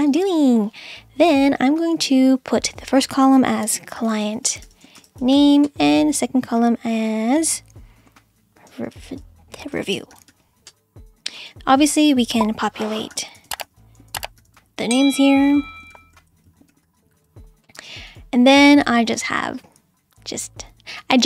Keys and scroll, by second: 3.4-5.8 typing, 8.7-10.8 typing, 12.9-17.8 typing.